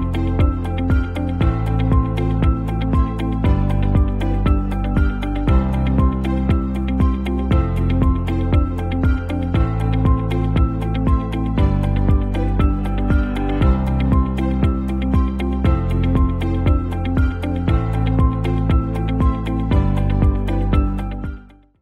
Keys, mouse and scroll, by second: 2.5 click.